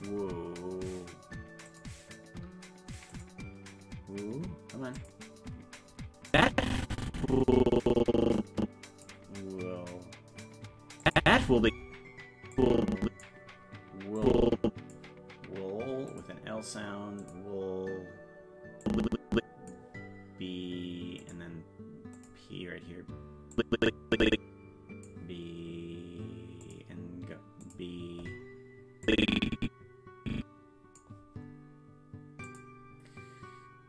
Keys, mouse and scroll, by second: 1.6 click, 3.1 click, 4.9 click, 6.3-9.0 drag, 11.0 click, 11.2 space, 12.5 click, 14.2 click, 16.1 click, 17.2 click, 18.8 click, 21.2 click, 22.1 click, 23.5-25.1 drag, 26.6 click, 27.6 click, 29.0-31.0 drag, 32.4 click.